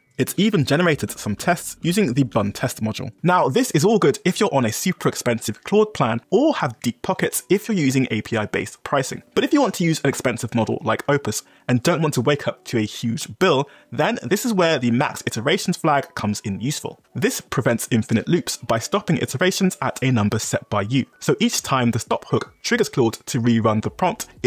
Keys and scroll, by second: 0.0 Tab, 1.2 Return, 1.7 j, 2.1 x.